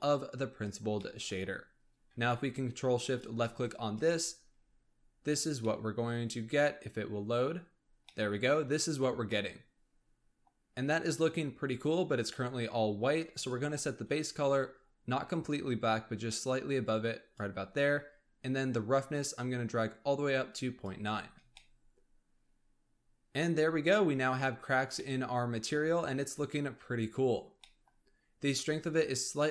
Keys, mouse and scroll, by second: 0.2 click, 0.9-3.0 middle drag, 3.0 ctrl+shift+click, 3.6-5.6 drag, 5.6-8.8 middle drag, 8.8-9.2 scroll up 2, 9.2-10.7 middle drag, 10.7-13.3 scroll down 1, 13.3 click, 18.8-21.3 drag, 21.3 scroll down 2, 21.5-23.5 middle drag, 23.5-24.7 scroll up 4, 24.7-25.0 scroll down 2, 25.0-25.9 middle drag, 25.9-26.6 scroll up 1, 26.6-27.3 scroll down 1, 27.3 scroll down 1, 27.6-28.0 middle drag, 28.0-29.2 scroll up 1, 29.2-29.5 drag.